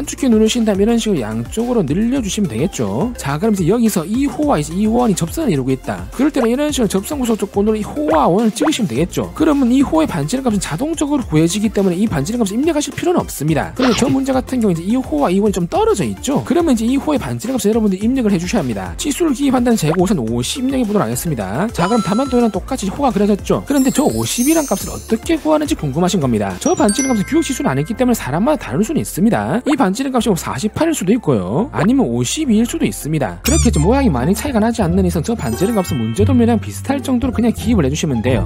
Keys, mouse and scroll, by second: 0.6 v, 1.2 click, 2.3 click, 6.3 ctrl+right click, 7.5 click, 8.2 click, 8.9 click, 9.7 d, 10.3 click, 12.0 click, 17.0 click, 19.0 d, 19.2 click, 19.8 click, 20.2 5, 21.2 click, 30.5 4, 31.0 click, 32.2-33.2 typing, 33.0 click.